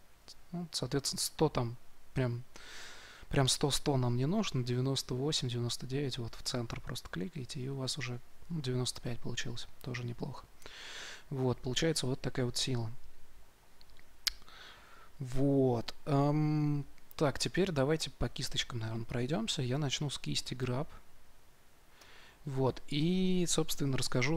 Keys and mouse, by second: 19.7-22.0 drag.